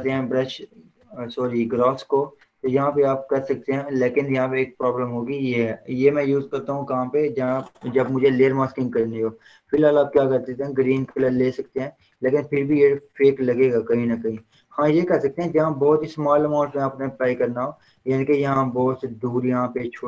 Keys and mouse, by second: 0.3 h, 1.5 click, 2.1 b, 2.8-4.8 drag, 8.0 click, 8.2 ctrl+z, 9.8 click, 11.1 Return, 12.2 click, 14.8 ctrl+z, 16.1 ctrl+0, 16.9 ctrl+z, 18.3 ctrl+z, 19.1 ctrl+shift+z.